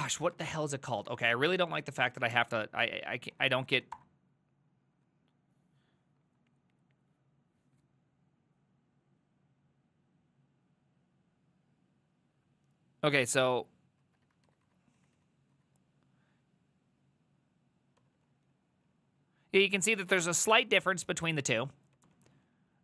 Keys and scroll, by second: 0.0-4.3 typing, 14.1 ctrl+a, 14.3 [, 14.5 ctrl+u, 14.7 ctrl+u, 15.0 ctrl+u, 15.2 ctrl+u, 15.6 ctrl+u, 18.0 ctrl+d, 18.2 ctrl+d, 18.3 ctrl+d, 18.5 ctrl+d, 18.6 ctrl+d, 18.8 ctrl+d, 19.0 ctrl+d, 20.5 ctrl+u, 20.7 ctrl+u, 20.9 ctrl+u, 21.1 ctrl+u, 21.3 ctrl+u, 22.0 ctrl+d, 22.2 ctrl+d, 22.3 ctrl+d, 22.5 ctrl+d, 22.6 ctrl+d, 22.7 ctrl+d.